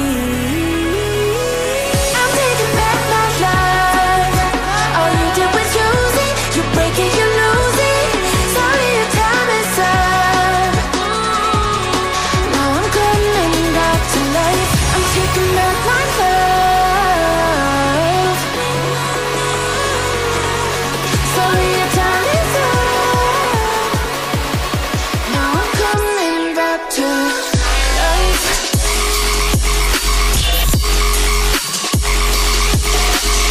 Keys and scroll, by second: 14.2-16.2 typing, 14.6 Caps_Lock, 22.9 n.